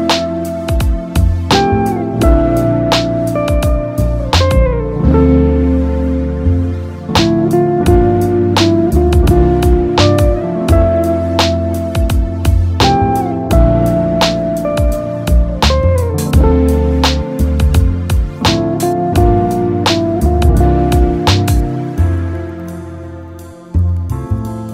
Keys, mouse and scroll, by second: 2.3-4.7 middle drag, 4.7-6.4 drag, 6.4-8.3 middle drag, 8.3 click, 9.6 click, 10.9-13.8 drag, 14.8 x, 16.3 click, 18.8-19.7 drag, 19.7-20.3 middle drag, 20.3 scroll up 2, 20.7-23.6 shift+middle drag, 23.6-24.7 drag.